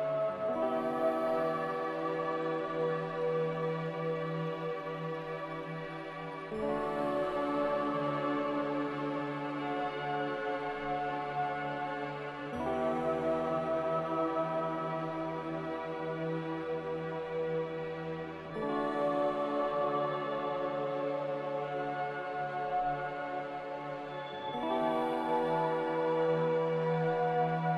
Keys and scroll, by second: 1.5 x, 7.7 m, 23.9 a.